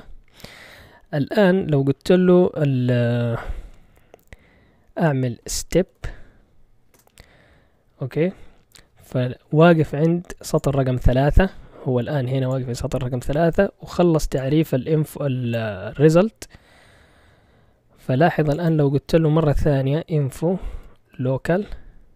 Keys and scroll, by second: 5.2-6.4 typing, 6.9 Return, 19.7-22.1 typing.